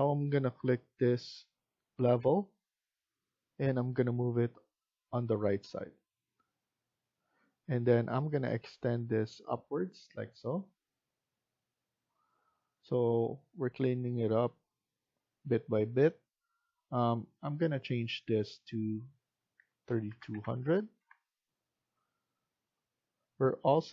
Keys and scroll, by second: 12.2 Escape, 19.2-20.6 typing, 20.9 Return, 21.7 Escape.